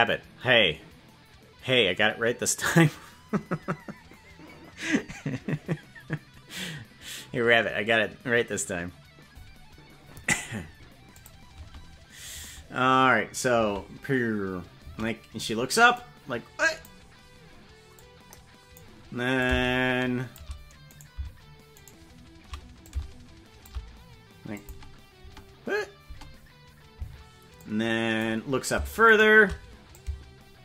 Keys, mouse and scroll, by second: 11.2 click, 11.6 space, 12.4 space, 13.6 space, 14.8 space, 15.9 click, 18.0 click, 19.4-20.4 shift+drag, 21.0 right click, 22.0 shift+right click, 22.8 shift+click, 24.5 click, 25.2 space, 26.2 space, 27.6 click, 29.3 shift+right click, 29.9-30.6 drag.